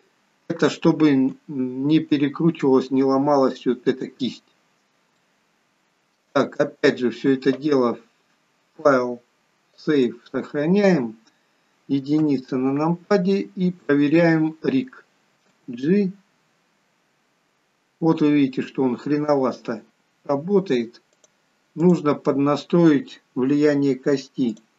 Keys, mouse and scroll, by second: 4.6 scroll down 1, 5.2 shift+middle click, 8.9 click, 12.6 KP_1, 14.3 click, 15.6 g, 21.9 click.